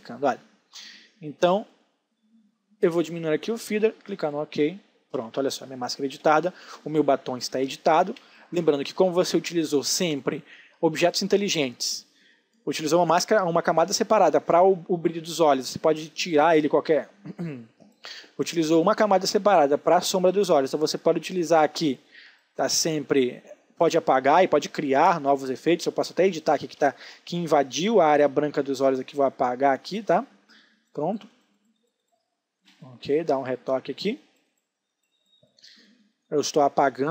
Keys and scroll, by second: 4.8 space, 7.3 ctrl+space, 24.0 space, 27.0 b, 32.2 space.